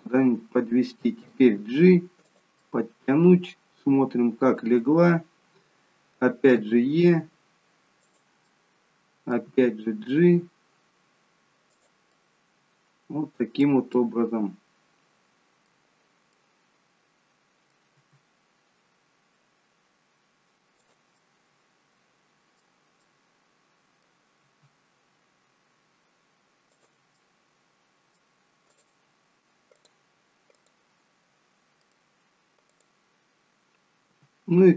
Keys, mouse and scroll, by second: 1.5 g, 2.5 middle click, 8.4 middle click, 9.4 g, 12.1 middle click, 13.9 middle click, 16.3 middle click, 17.9 e, 21.1 middle click, 23.0 middle click, 24.3 e, 27.1 middle click, 28.7 click, 29.7 click, 31.2-31.7 scroll up 2, 31.7 middle click, 31.7-32.1 scroll up 1, 32.7 click, 34.0 g.